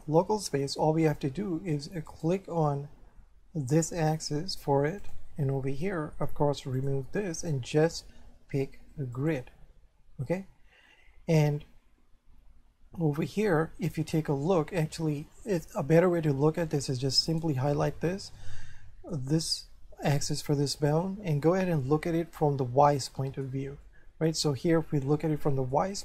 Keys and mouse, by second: 2.1 right click, 5.0 click, 6.8 click, 9.2 click, 11.6 middle click, 17.3 right click, 18.4 middle click, 21.0 middle click, 23.8 shift+middle click, 24.5 middle click.